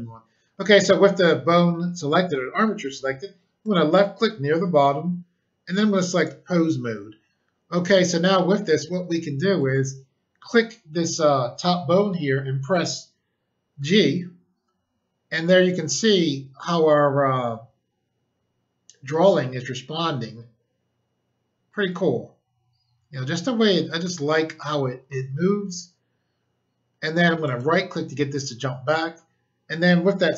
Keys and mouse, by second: 3.6 click, 6.1 click, 9.5 click, 9.7 click, 13.7 g, 27.4 right click.